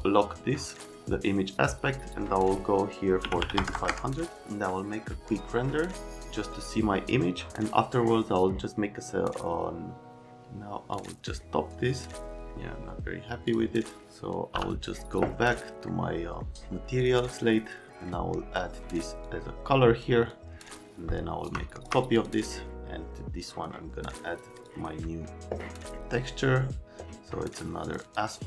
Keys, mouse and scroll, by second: 3.2 KP_2, 3.4 KP_5, 3.5 KP_0, 3.7 KP_0, 3.9 KP_Enter, 10.9 click, 13.5 click, 14.5 m, 15.5 right click, 16.4 right click, 17.0 click, 17.8 right click, 19.2 click, 20.3 click, 21.5 click, 22.1 click, 22.3 click, 23.4 click, 24.6 click.